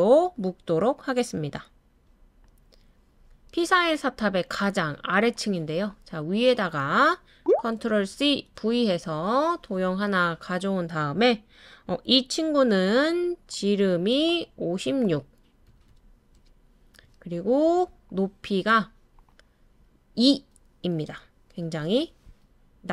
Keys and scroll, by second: 8.1 super+c, 8.5 super+v, 15.4-16.5 typing, 20.2-21.1 typing.